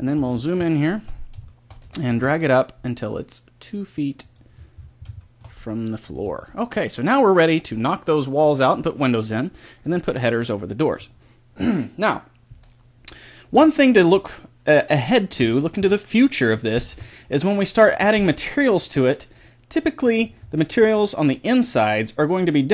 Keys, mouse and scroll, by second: 1.8 g, 4.5 middle click, 6.1 Tab, 7.2-8.7 middle drag, 10.4-14.6 middle drag, 16.9 Tab, 17.9 a, 21.1-22.1 middle drag, 22.5-22.7 middle drag.